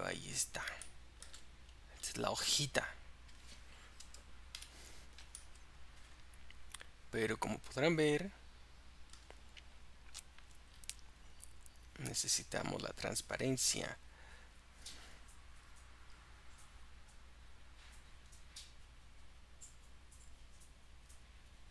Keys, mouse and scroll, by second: 0.2 click, 1.7-2.2 scroll up 5, 2.9 click, 4.6 KP_Decimal, 5.4-8.4 middle drag, 12.1-21.7 drag.